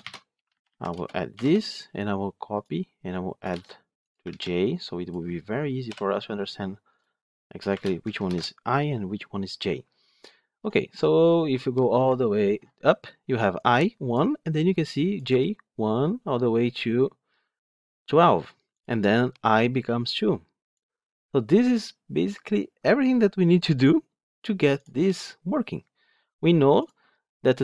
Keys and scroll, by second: 3.4 ctrl+c, 4.2 ctrl+v, 8.1 ctrl+shift+F10.